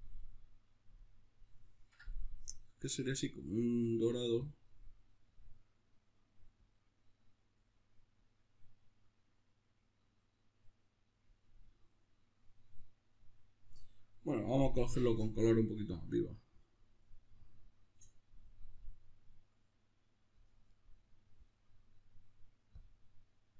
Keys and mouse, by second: 0.9 click.